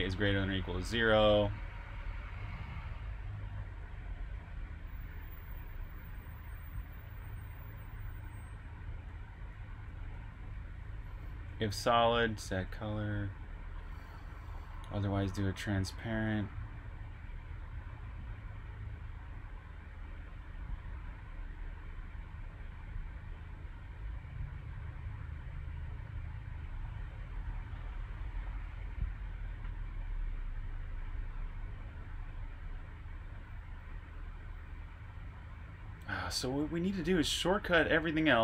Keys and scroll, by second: 8.6-9.9 typing, 11.0-12.8 typing, 14.0-15.1 typing, 17.3 typing, 24.2-24.9 typing, 34.0-35.6 typing.